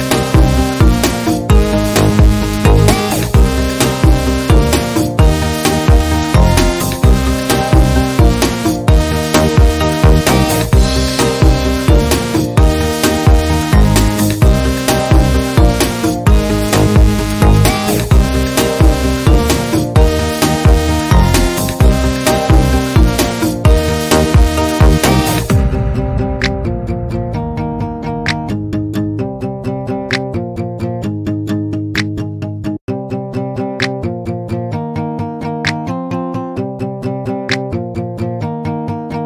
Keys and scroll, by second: 1.2 Down, 1.9 Down, 10.8 Right, 11.1 Down, 11.5 Right, 12.1 Left, 17.3 ctrl+c, 19.5 ctrl+z, 23.2 ctrl+z, 27.7 ctrl+z, 33.5 Up, 34.0 Up, 34.0 Down, 34.1 Left, 34.6 Left, 35.0 Up, 36.6 Up, 37.3 Up, 37.5 Left, 38.0 Right.